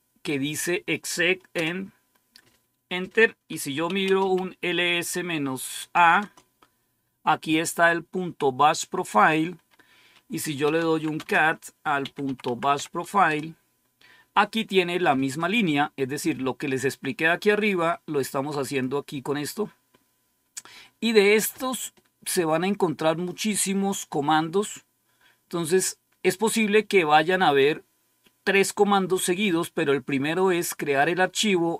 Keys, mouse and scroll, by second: 1.5 Return, 3.4-4.6 typing, 5.8 typing, 6.1 Return, 7.4-8.1 typing, 9.1 click, 10.3-12.9 typing, 13.2 Return, 18.6 click, 19.9-20.5 scroll down 1, 20.7-21.0 scroll up 1, 30.5 click.